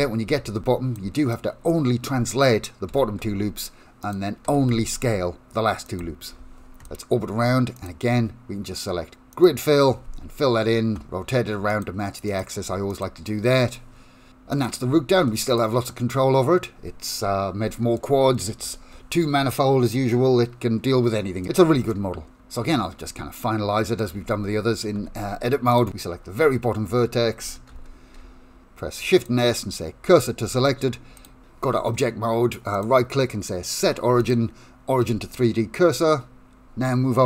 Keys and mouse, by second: 0.0-1.1 typing, 1.7 middle click, 3.1 e, 4.7 e, 8.0-9.6 drag, 12.4 click, 13.0 click, 14.7 click, 15.6 click, 15.9-17.1 middle drag, 17.3 Tab, 17.4 middle click, 23.5 middle click, 24.3 Tab, 25.1 1, 25.8 click, 27.8 shift+s, 30.6 Tab, 31.3-34.4 right drag, 35.4-37.2 middle drag.